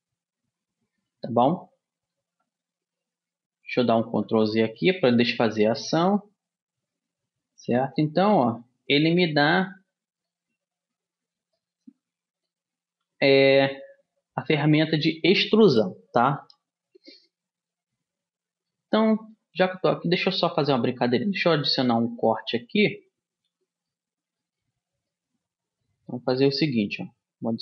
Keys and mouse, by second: 4.0 ctrl+z, 5.1-7.0 middle drag, 7.0 click, 7.2-9.0 right drag, 8.0 click, 11.1 click, 11.7-13.0 middle drag, 13.8-15.5 drag, 18.8-27.3 middle drag, 27.3 ctrl+r.